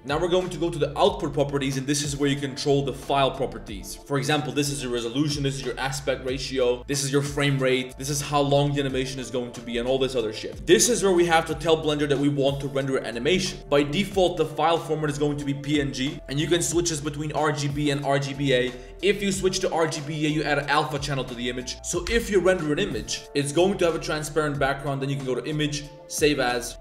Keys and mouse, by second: 13.9-14.8 drag, 16.3 click, 19.2 click.